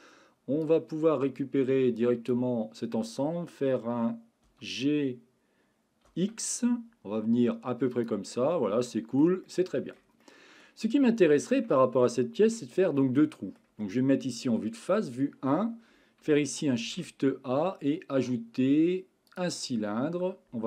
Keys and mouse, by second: 0.8-2.3 drag, 4.5 g, 6.1 x, 7.9 click, 8.4 middle click, 9.5 shift+middle click, 10.2 middle click, 11.3 middle click, 11.7 Tab, 12.3 shift+middle click, 12.8 middle click, 14.5 KP_1, 16.8 shift+a.